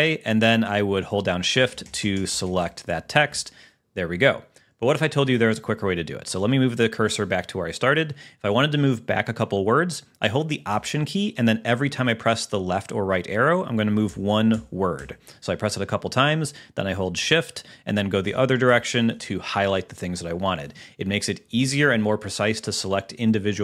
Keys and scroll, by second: 1.6 shift+Right, 5.7 Right, 14.1 alt+Left, 18.3 alt+shift+Right, 18.8 alt+shift+Right.